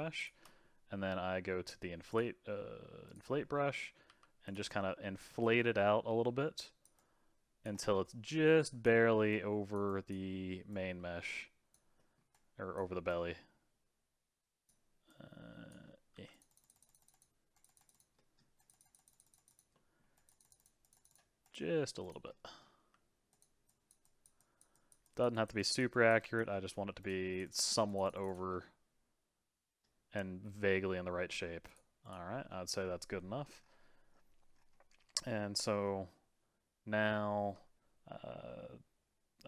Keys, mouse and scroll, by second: 0.2 shift+click, 0.5-2.1 middle drag, 2.1-3.4 drag, 3.4 scroll up 2, 3.7 middle click, 4.0 f, 4.7-7.7 drag, 7.7 middle click, 8.0 click, 9.0 middle click, 9.3-10.3 drag, 10.3 middle click, 10.7-12.0 drag, 12.0 middle click, 12.3-15.8 drag, 15.8-16.1 scroll down 2, 16.1 f, 16.5-18.1 drag, 18.1 middle click, 18.6-19.7 drag, 19.7 middle click, 20.1-22.3 drag, 22.3 middle click, 22.8 f, 23.7-26.5 drag, 26.5 middle click, 27.0-28.5 drag, 28.5-31.6 middle drag, 31.7-32.5 drag, 32.5-35.6 middle drag, 35.8-38.9 middle drag.